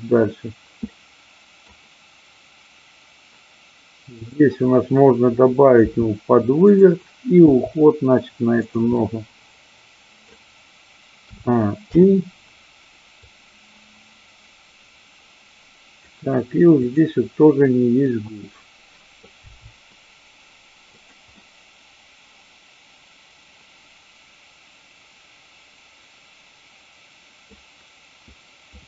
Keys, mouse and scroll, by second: 0.9 middle click, 4.2-5.1 drag, 5.9 r, 6.6 click, 7.5 g, 8.6 click, 8.9-9.8 scroll up 1, 9.8-10.1 scroll up 1, 10.1 middle click, 11.9 i, 13.2-16.1 drag, 16.9 click, 18.1-19.2 middle drag, 19.5 g, 20.9 click, 21.4-27.6 middle drag.